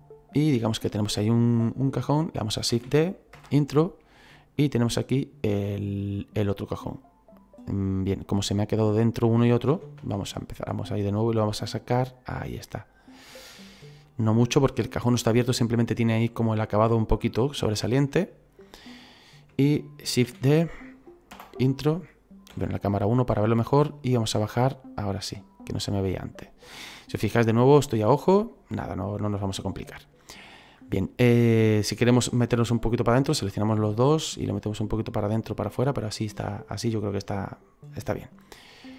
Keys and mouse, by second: 2.7 shift+d, 4.3 click, 6.8 middle click, 8.6 right click, 9.7 ctrl+z, 11.4 click, 14.0 click, 15.0 middle click, 18.1 middle click, 20.2 shift+d, 22.5 KP_1, 23.5 click, 28.0 middle click, 29.5 middle click, 31.4 right click, 32.5 shift+right click, 34.0 click, 36.0 middle click, 37.2 middle click.